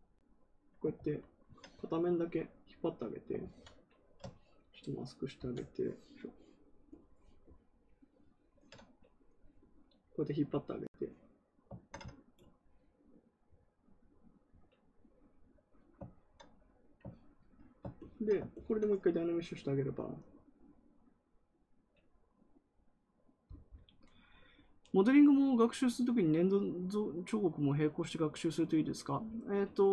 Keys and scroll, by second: 0.9 ctrl+z, 3.3 ctrl+z, 5.3 ctrl+z.